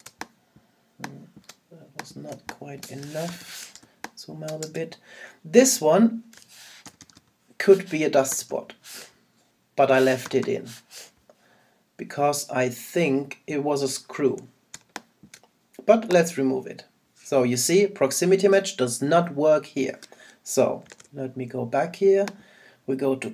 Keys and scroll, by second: 3.3 super+-, 8.3 super+-, 14.7 super+space, 20.9 super+z.